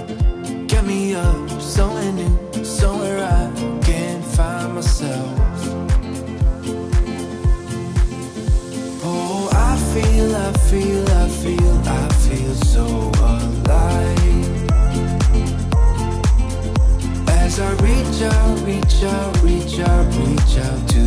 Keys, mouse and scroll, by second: 19.6-21.0 drag.